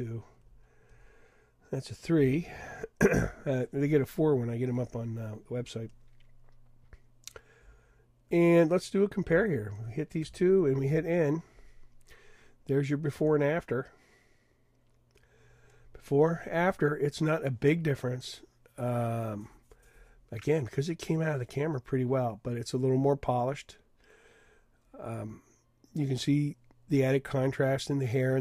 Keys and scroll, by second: 2.1 3, 10.9 shift+n, 13.2 Tab.